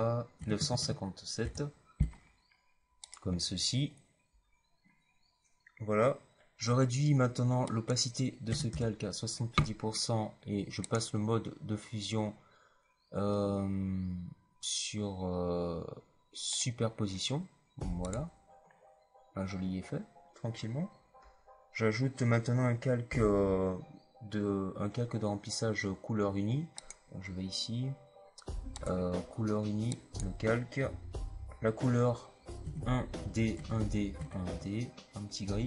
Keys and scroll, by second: 0.0-0.5 typing, 8.4 KP_7, 8.6 KP_0, 32.5 KP_1, 33.1 d, 33.5 KP_1.